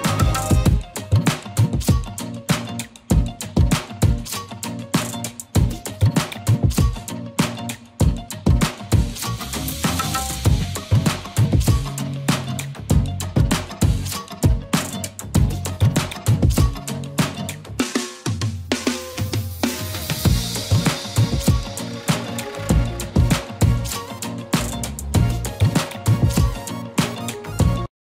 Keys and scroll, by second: 1.6 e, 2.1 b, 4.3 ctrl+z, 5.6 ctrl+z, 6.1 ctrl+z, 7.4 ctrl+z, 7.9 ctrl+z, 8.7 ctrl+z, 9.9 ctrl+z, 10.5 e, 11.1 b, 12.8 ctrl+z, 16.0 ctrl+z.